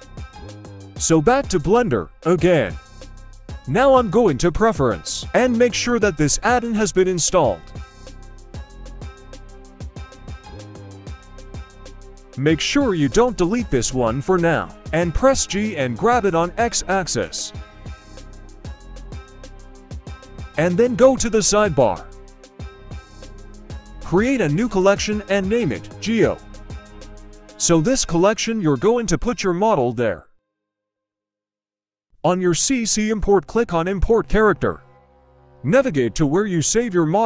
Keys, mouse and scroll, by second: 0.4-1.0 middle drag, 1.8-2.8 drag, 9.4-10.0 middle drag, 10.5 middle click, 12.4 g, 17.8-18.1 shift+middle drag, 17.8-18.1 shift+scroll down 1, 19.1-20.8 drag, 21.0 click, 21.2-21.7 right drag, 22.2 click, 22.5-25.6 drag, 26.4-29.2 drag, 29.2-30.6 scroll down 2, 30.6 click.